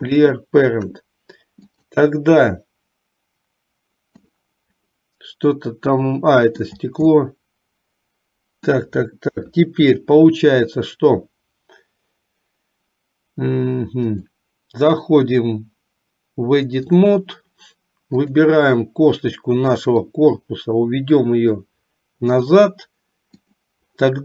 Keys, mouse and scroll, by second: 1.7 click, 4.5-6.9 middle drag, 7.3-8.9 middle drag, 9.5 KP_3, 14.2-17.3 drag, 18.3 click, 20.0-22.5 drag, 23.6 click.